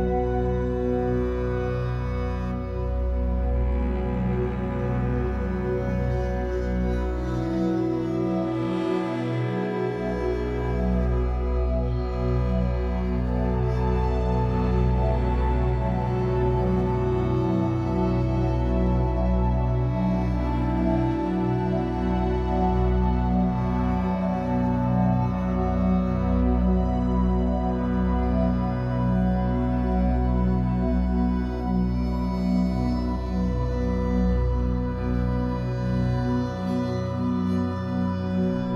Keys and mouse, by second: 1.1 shift+click, 4.0 ctrl+d, 4.9 shift+Right, 5.4 shift+Right, 5.8 shift+Right, 6.4 Left, 6.7 Left, 7.9 click, 8.5 click, 9.5 shift+click, 10.9 click, 11.8 click, 12.7 shift+click, 13.9 click, 16.1 -, 16.2 -, 16.4 -, 19.5-21.1 drag, 21.7 shift+click, 24.1 shift+click, 25.2 click, 27.8 click, 28.6 click, 30.3 click, 31.0 click, 31.6 click, 32.5 click, 33.4 Page_Down, 33.6 Page_Down, 34.0 Page_Down, 34.3 Page_Down, 35.2 click, 35.7 -, 35.9 -, 36.1 -.